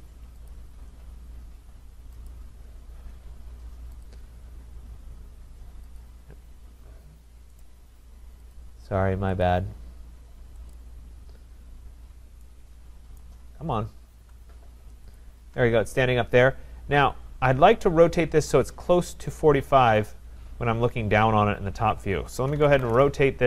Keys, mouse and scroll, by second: 0.5 click, 2.3 click, 4.1 click, 7.6 right click, 8.5 click, 9.5 click, 10.7 click, 13.2 right click, 13.5-14.1 scroll, 15.2 shift+click, 16.5-18.2 scroll down 3, 19.2 click, 19.3 click, 19.6 shift+click, 20.4 scroll down 2, 21.0-21.5 scroll up 3, 21.5-22.4 scroll up 3, 22.1-23.4 typing, 22.4 middle click.